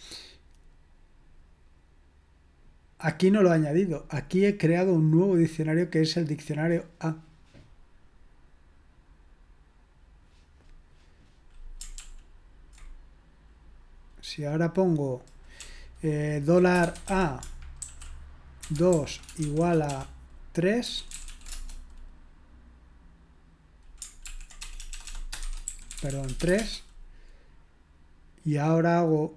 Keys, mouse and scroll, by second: 12.0 ctrl+p, 16.2-21.3 typing, 21.5 Return, 24.2 ctrl+p, 24.6-26.9 typing.